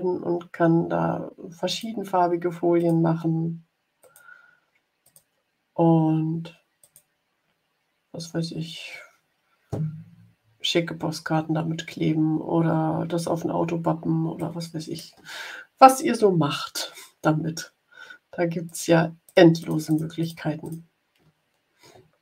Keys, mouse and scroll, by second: 1.6 click, 2.7 click, 3.9 click, 4.9 click, 6.7 click, 14.3 click, 18.6 click, 19.2 click, 19.5 click, 20.5 click, 21.9-22.2 ctrl+scroll down 1.